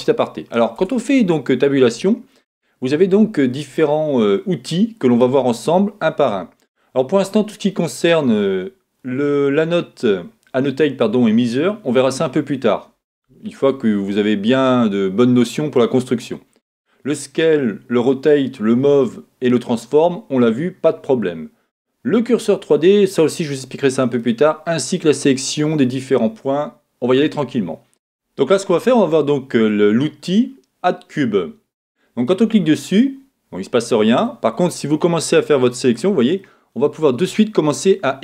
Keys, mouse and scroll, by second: 32.2 click, 34.2 click, 36.5-38.2 middle drag.